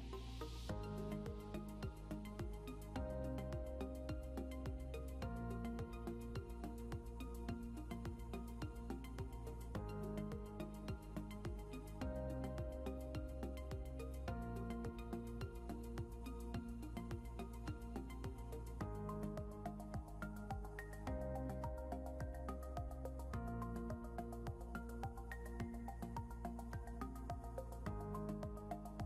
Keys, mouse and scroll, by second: 0.7 End, 1.0 Delete, 3.4 double click, 4.9-6.3 typing, 6.4 Return, 9.2 scroll up 1, 13.9 scroll up 1, 24.6 scroll down 1, 26.0 scroll up 1, 26.5-27.4 scroll up 1, 28.1 scroll down 1.